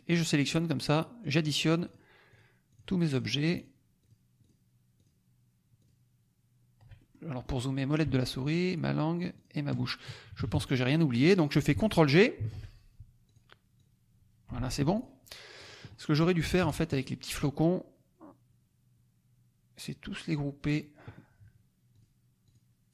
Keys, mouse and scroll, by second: 0.1 shift+click, 0.8 shift+click, 1.2 shift+click, 1.8 shift+click, 2.3 shift+click, 2.7 shift+click, 3.1 shift+click, 3.5 shift+click, 4.0 shift+click, 4.3 shift+click, 4.9 shift+click, 5.7 shift+click, 6.9 shift+middle click, 8.4 shift+click, 9.4 shift+click, 10.1 shift+KP_Subtract, 12.3 ctrl+g, 13.2 click, 13.7 click, 14.6 ctrl+z, 14.8 ctrl+click, 15.7 click, 15.8 click, 16.6 -, 17.6-20.0 drag, 21.9 click, 22.4 click.